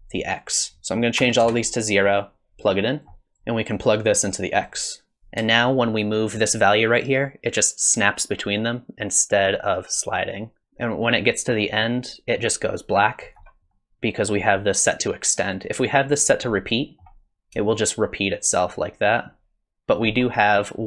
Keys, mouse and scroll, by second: 2.5 click, 3.2 click, 3.2 g, 4.0 click, 5.1 click, 6.7 shift+click, 13.7 middle click, 15.4 click, 16.7 middle click, 17.7 shift+click.